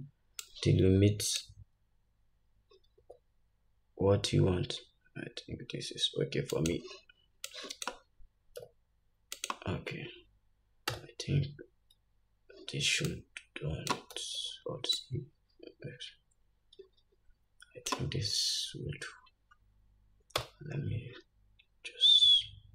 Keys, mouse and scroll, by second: 0.5-6.8 drag, 3.0 s, 7.5-9.5 drag, 8.7 s, 11.0 Tab, 13.2-22.7 drag, 14.2 alt+z, 20.4 Tab.